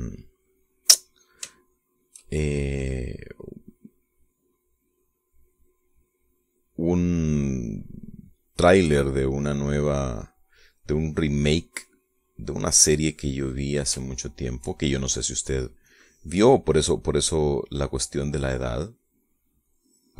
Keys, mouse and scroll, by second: 2.7 shift+click, 10.6-12.4 drag, 12.8 click, 14.0 click, 15.2 shift+click, 16.1 shift+middle click, 17.0 click, 19.0-20.1 drag.